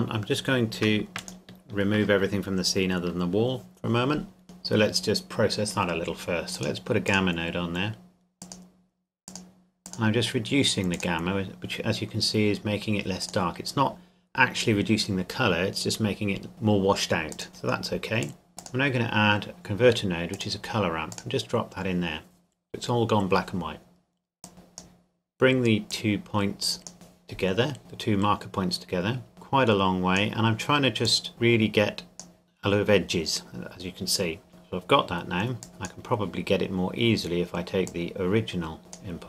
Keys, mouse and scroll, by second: 1.2 shift+click, 2.3-3.7 scroll up 1, 4.4 click, 13.4 click, 17.3 click, 18.2 click, 24.4 click, 29.3 click, 35.6 click, 36.5 scroll down 1, 37.9 click.